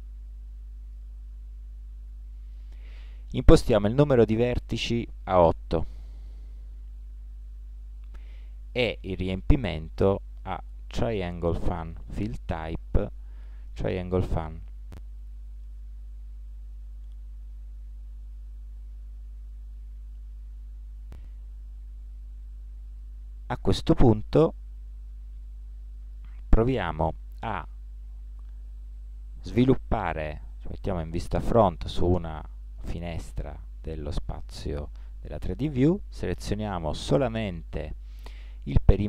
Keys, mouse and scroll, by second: 3.5-5.5 drag, 7.7 middle click, 7.7-8.3 scroll down 1, 8.8-13.1 drag, 17.5 Tab, 18.2 middle click, 24.5 click, 27.3 t, 27.9 t, 28.6-31.1 middle drag, 31.3 KP_1, 32.4-34.6 middle drag.